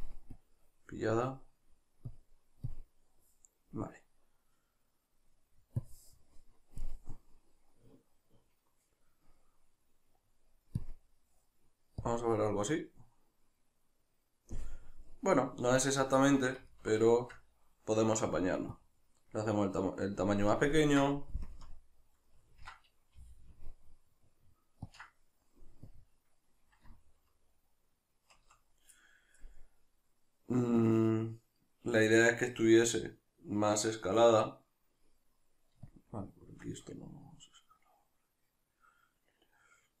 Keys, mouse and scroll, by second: 16.2-18.7 shift+middle drag, 18.7-20.7 drag, 20.7-25.0 ctrl+middle drag, 21.5 KP_Decimal, 23.2 g, 25.0 ctrl+click, 25.9-35.2 drag, 35.2 middle click, 35.9-37.5 shift+drag, 37.5-40.0 middle drag.